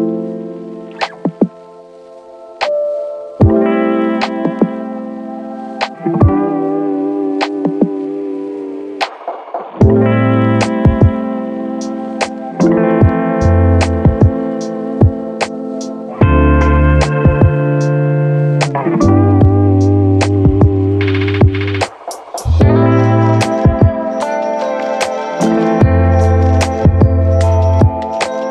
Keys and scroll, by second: 9.0 f, 14.1 Return, 16.3 Delete, 18.3 Delete, 22.2 space, 23.8 ctrl+1.